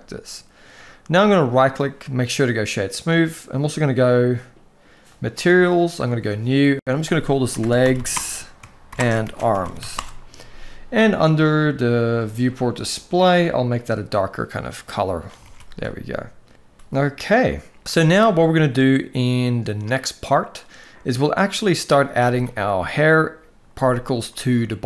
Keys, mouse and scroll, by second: 1.2-2.1 right drag, 4.8 click, 5.8 click, 6.4-9.6 drag, 12.9 click, 15.1 alt+a, 15.5-16.7 middle drag, 16.7 ctrl+s, 17.2-17.9 middle drag, 18.4-20.3 middle drag, 21.3 middle drag, 24.0 middle click.